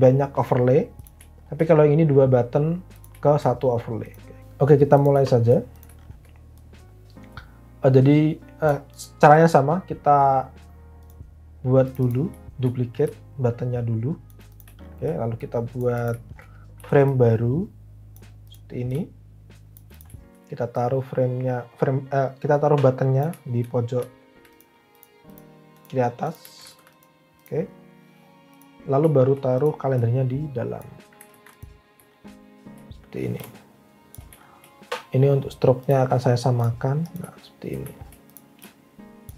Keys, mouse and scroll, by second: 4.4 Escape, 16.8 f, 26.6 alt+a, 26.6 alt+w, 31.3 alt+a.